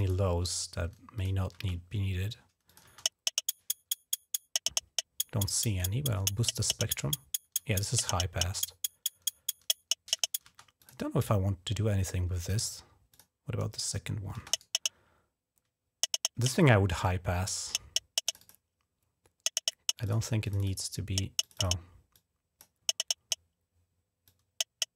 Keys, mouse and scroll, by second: 0.9 click, 1.4 space, 2.4 click, 2.6 space, 5.6 click, 6.7 click, 10.3 space, 10.6 click, 12.2 click, 12.9 click, 14.1 space, 14.3 right click, 16.7 click, 18.0 click, 18.2 click, 19.8 click, 20.2 click, 20.4 click, 21.2 click, 21.9 click, 24.0-24.9 drag.